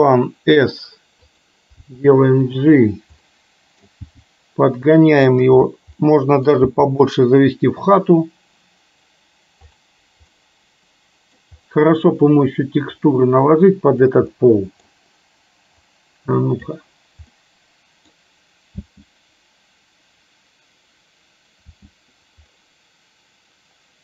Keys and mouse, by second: 1.9 g, 3.2 middle click, 4.2 g, 6.0 middle click, 6.8 g, 10.5 middle click, 13.2 click, 14.4 middle click, 16.1 click, 17.5 middle click, 18.9 space, 21.9 space.